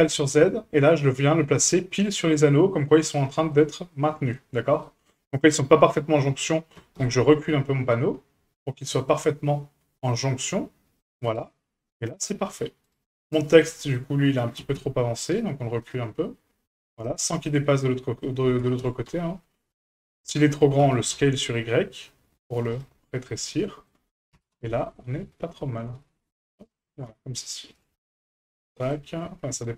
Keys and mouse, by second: 1.5-2.9 middle drag, 3.5 middle click, 4.8 middle click, 6.7 g, 11.5 shift+middle click, 12.1 middle click, 12.8 right click, 13.2 right click, 13.5-13.9 middle drag, 14.6 g, 17.0-18.2 middle drag, 18.6 g, 20.8 s, 23.0 middle click, 24.3 g, 27.0 a, 28.0 middle click.